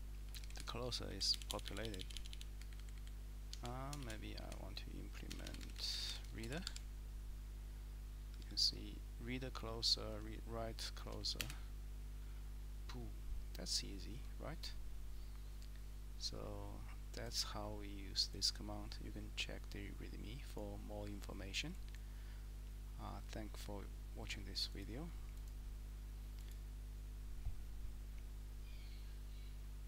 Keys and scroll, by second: 0.4 Down, 0.6 Down, 1.1 Up, 1.3-2.4 typing, 2.6 Up, 2.8 Up, 2.9 Up, 3.5 Escape, 4.0 :, 4.5 shift+Up, 5.3 BackSpace, 5.4 BackSpace, 5.8-6.5 BackSpace, 8.3 Tab, 8.4 Tab, 8.6 Tab, 11.6 Return.